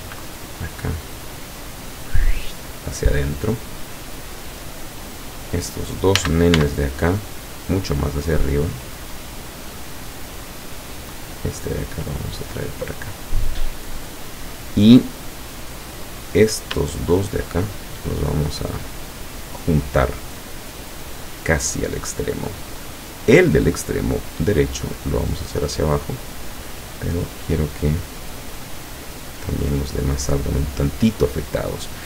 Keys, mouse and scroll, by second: 0.0 b, 0.2-1.2 drag, 1.7-5.1 drag, 6.2 a, 6.6 b, 7.1-7.7 drag, 8.1-8.8 drag, 9.0-10.8 drag, 11.2 right click, 11.7 click, 16.2 right click, 17.1 shift+right click, 17.8-21.6 shift+drag, 21.8-22.2 scroll up 2, 22.8 right click, 24.4-25.6 drag, 25.6-26.1 scroll up 2, 26.1-27.0 scroll down 4, 31.9 scroll down 2.